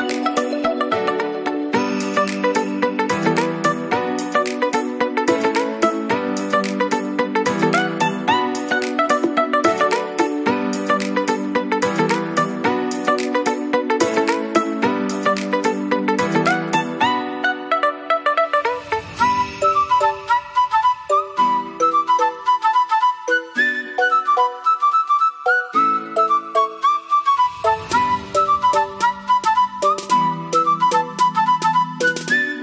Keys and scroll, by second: 2.4 ctrl+z, 19.2 ctrl+[.